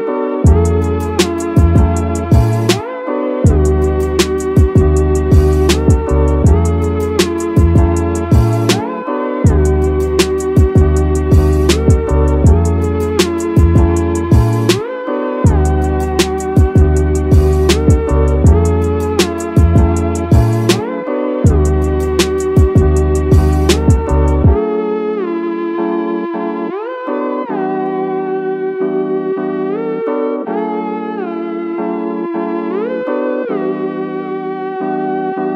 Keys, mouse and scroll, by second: 0.0-0.3 scroll up 2, 0.4 click, 0.7-1.0 middle drag, 1.9 click, 2.4 click, 2.9 middle drag, 3.4 click, 3.7 middle drag, 4.2 click, 5.5 click, 6.1-6.5 scroll down 2, 6.7 click, 7.7 click, 8.0 middle drag, 8.5 middle click, 9.3 KP_1, 10.5 click, 10.9 shift+middle drag, 12.1-12.6 scroll down 1, 12.6-13.2 middle drag, 13.4 shift+middle drag, 18.0 ctrl+s, 25.2 middle drag, 25.6 shift+scroll up 1, 25.6 shift+middle drag, 26.0 middle drag, 27.2 KP_1, 28.7 click, 29.9 shift+a.